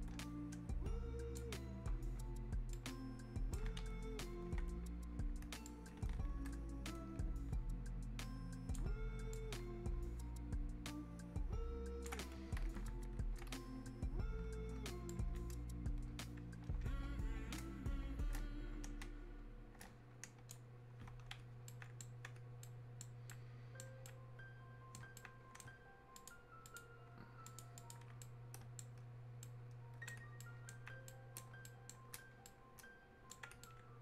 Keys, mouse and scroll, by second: 2.7-5.6 ctrl+drag, 5.6-15.1 drag, 15.1-17.6 ctrl+drag, 17.6 ctrl+space, 21.6-26.2 alt+right drag, 26.2 ctrl+click, 28.2-34.0 right drag.